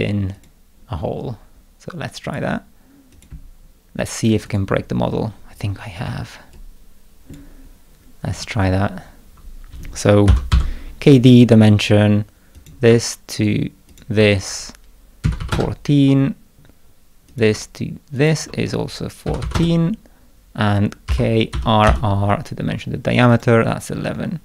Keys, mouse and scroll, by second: 0.3 click, 2.2 click, 3.1 click, 4.4 right click, 5.3 scroll up 1, 5.5 scroll down 1, 6.0-7.3 middle drag, 6.5 click, 7.6 scroll up 1, 10.0-11.0 typing, 12.5 click, 13.9 ctrl+click, 17.3 click, 18.1 ctrl+click, 20.8-22.3 typing, 23.3 click.